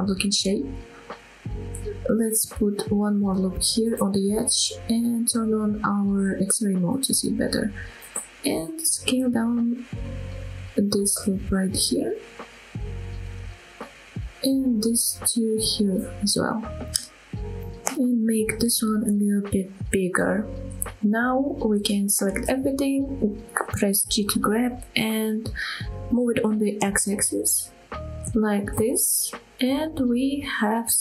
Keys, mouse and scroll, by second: 0.7 click, 2.5 ctrl+r, 5.0 click, 6.8 click, 7.9 click, 8.9 s, 13.4 click, 14.7 shift+middle click, 15.3 click, 15.9 s, 17.7 click, 18.7 click, 19.2 s, 20.6 click, 20.8 scroll down 1, 21.1 shift+middle click, 22.0 click, 23.0 g, 23.7 x, 27.4 click, 27.7 scroll down 1, 28.0-28.7 scroll up 3, 28.7-29.9 scroll down 2, 29.9 middle click, 30.5 scroll down 1.